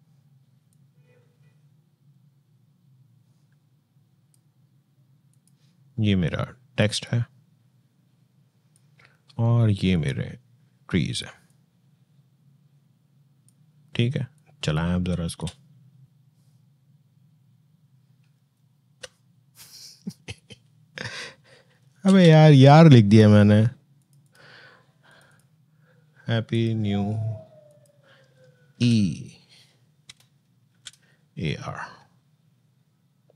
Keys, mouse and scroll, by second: 15.0 space, 21.8 space, 23.8 click, 28.6 e, 29.9 BackSpace, 30.5 shift+e.